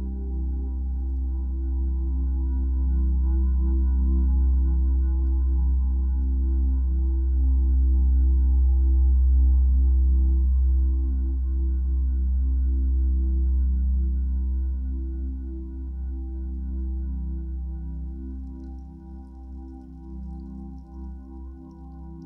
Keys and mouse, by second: 3.6 click, 6.3 click, 8.5 click, 9.6 click, 12.0-12.4 alt+drag, 13.4-13.8 alt+drag, 14.4 alt+click, 16.7-17.9 drag, 17.9 ctrl+s, 20.2-22.2 drag.